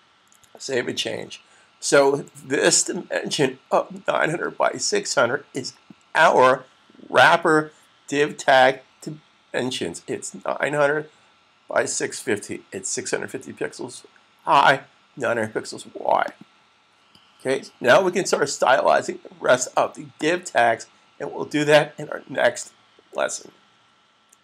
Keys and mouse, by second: 0.2 super+s, 2.5 click, 16.1 click, 20.0 click.